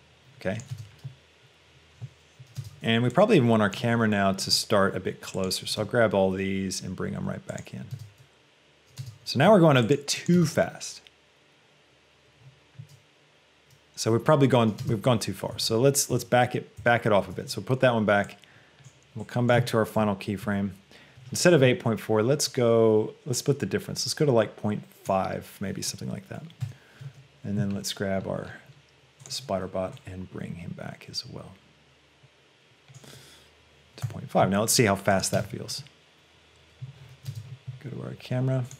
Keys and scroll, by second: 7.0 g, 9.0 space, 9.7 g.